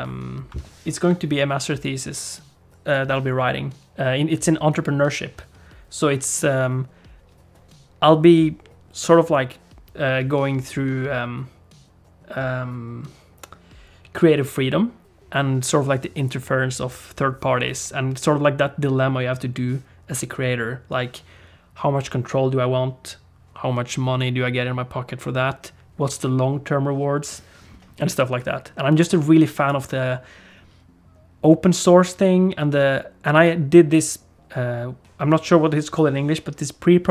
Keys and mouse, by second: 0.0 F11, 2.0 F11.